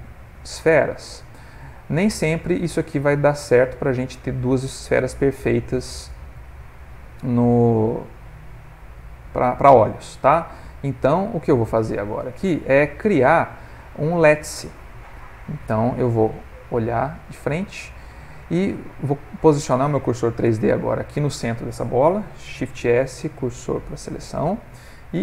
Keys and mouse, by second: 2.9 ctrl+middle click, 3.4 middle click, 5.2 middle click, 6.9 middle click, 10.5 right click, 12.0 ctrl+middle click, 12.4 middle click, 16.6 click, 17.7 ctrl+middle click, 22.9 shift+s.